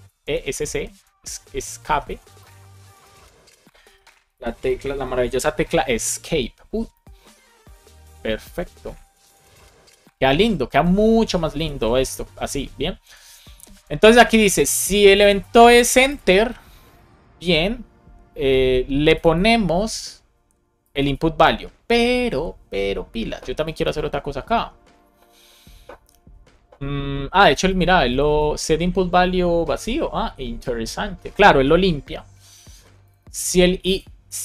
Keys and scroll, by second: 0.0 BackSpace, 0.6 BackSpace, 3.8 alt+shift+g, 4.6 super+s, 6.7 Right, 6.9 Left, 7.6 BackSpace, 7.8 super+s, 9.3 alt+shift+f, 9.9 super+s, 11.5 super+s.